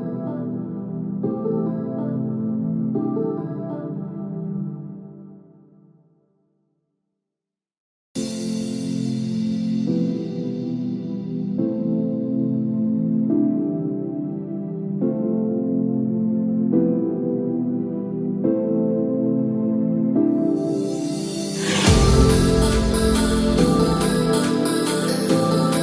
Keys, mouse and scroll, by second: 4.4 click, 7.3 click, 9.1 Tab, 10.3-11.2 scroll down 10, 11.9-12.5 scroll down 2, 12.3-12.8 scroll up 2, 12.8-14.3 scroll down 2, 14.3 scroll down 1, 14.9 click, 15.1-16.4 scroll up 13, 16.4-17.0 scroll up 2, 18.0 click, 18.0-18.6 scroll up 1, 18.6-20.3 scroll down 9, 19.4-20.3 scroll up 1, 23.3 shift+click.